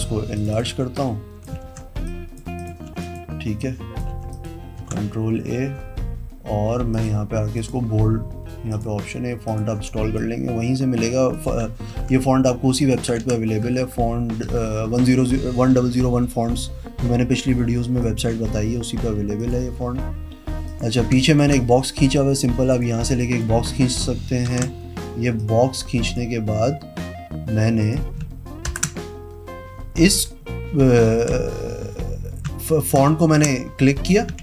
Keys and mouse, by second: 0.5 click, 0.9 v, 1.8 ctrl+t, 2.3 click, 2.8 click, 3.1 v, 3.8 click, 4.3 t, 4.5 click, 5.0 ctrl+a, 7.1 click, 7.8 click, 8.9 click, 11.1 click, 12.1 ctrl+a, 13.0 click, 13.3 ctrl+d, 13.8 Up, 14.0 Up, 14.6 Up, 14.8 Up, 15.1 Up, 15.9 Up, 16.3 Down, 18.2 click, 19.6 click, 20.9 click, 21.5 shift+click, 22.9 click, 23.4 click, 24.7 ctrl+z, 25.6 click, 28.0 click, 28.9 ctrl+BackSpace, 33.1 ctrl+click.